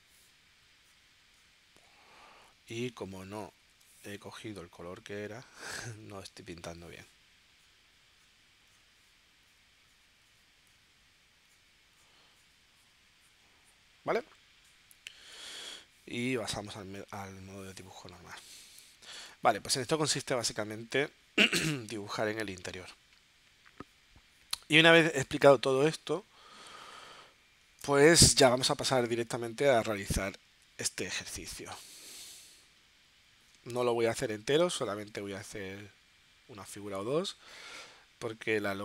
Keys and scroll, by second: 4.1 super+z, 15.3 v, 18.4 z, 19.3 space, 20.9 space, 29.7 super+Tab, 31.4 z, 33.5 space.